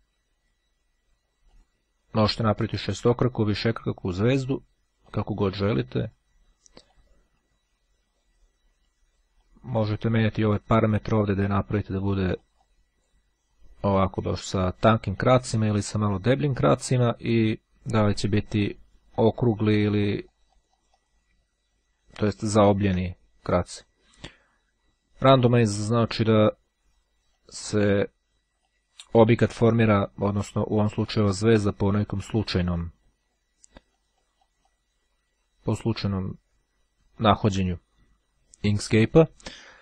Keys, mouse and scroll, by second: 0.5-2.2 drag, 3.0 click, 3.8 click, 5.9 click, 8.6-9.6 drag, 9.9-10.9 drag, 11.6-13.0 drag, 15.0-17.2 drag, 17.7-21.6 drag, 21.8-22.3 ctrl+scroll up 2, 22.5-23.0 ctrl+scroll down 2, 25.3 click, 26.9-28.1 drag, 28.7 click, 29.8-32.2 drag, 32.6 click, 33.6-35.1 drag.